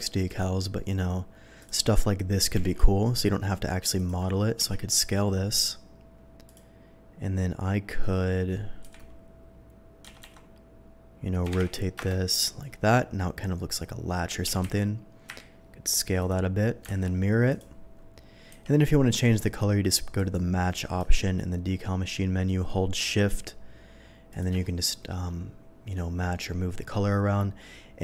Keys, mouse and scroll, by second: 0.3 click, 1.6 click, 3.1 ctrl+g, 4.0 click, 4.6 s, 6.5 click, 9.1 r, 10.2 z, 11.4 1, 11.9 0, 12.0 Return, 14.4 s, 14.6 x, 15.3 y, 16.2 click, 16.9 x, 17.5 click, 18.6 v, 20.2 click, 24.3 click, 24.6 scroll down 1.